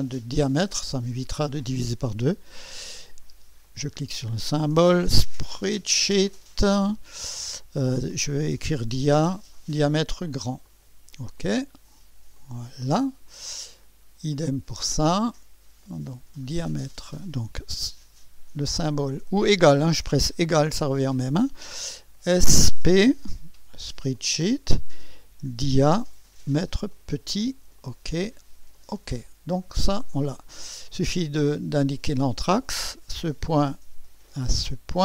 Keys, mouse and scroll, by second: 0.1 click, 3.6 click, 5.1 s, 5.6 p, 6.3 click, 8.6-9.0 typing, 10.6 click, 11.4 click, 12.4 click, 14.3 click, 16.3 click, 20.5 typing, 22.1 typing, 23.2 typing, 24.1 click, 25.3-25.8 typing, 26.9 click, 27.8 click, 28.8 click, 32.8 click, 34.5 click.